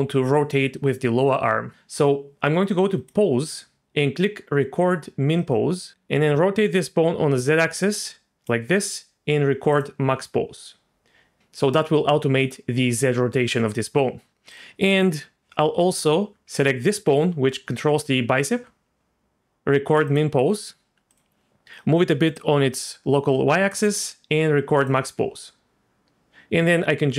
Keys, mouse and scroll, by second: 3.0 click, 5.4 click, 5.9-8.5 drag, 5.9 r, 9.7 click, 14.5 click, 16.5 g, 20.1 click, 21.1 click, 21.6 click, 22.3 click, 24.8 click.